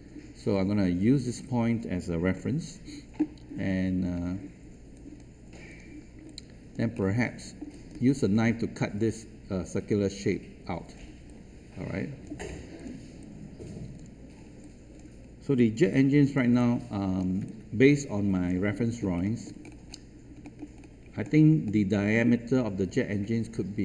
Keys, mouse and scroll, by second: 4.9 click, 6.2 alt+click, 7.2 alt+middle click, 7.6 alt+click, 8.0-9.0 scroll up 1, 10.9 scroll down 1, 11.2 alt+click, 12.4 scroll up 1, 12.7 click, 13.8 alt+click, 14.3-14.6 alt+scroll down 1, 15.9 alt+click, 16.5 alt+click, 17.4 alt+space, 17.5 click, 18.9 scroll down 1, 19.2 alt+middle click, 19.6-19.9 scroll up 1, 20.4 alt+middle click, 20.7-21.0 scroll up 1, 21.2 alt+middle click, 23.0-23.7 scroll down 1.